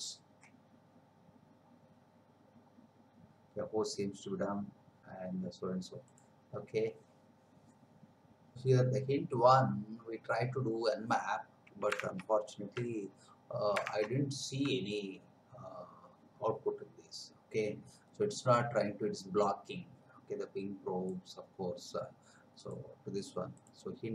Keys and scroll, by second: 12.1 alt+Tab, 14.0 alt+Tab.